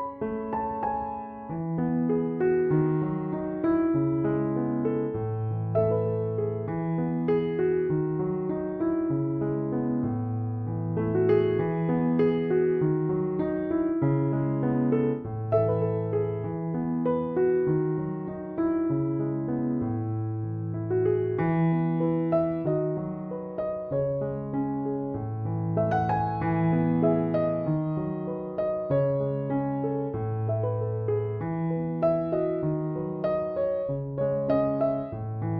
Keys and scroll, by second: 20.0 Escape, 23.8-24.8 typing, 30.0-31.5 typing, 34.8 Escape.